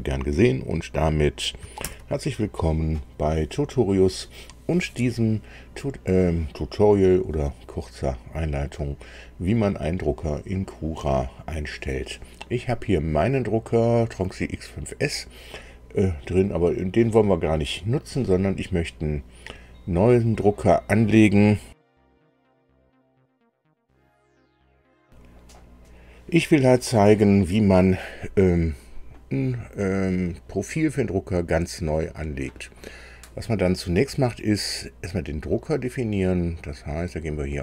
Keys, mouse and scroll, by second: 1.8 super+i, 25.0 super+r, 37.2 click.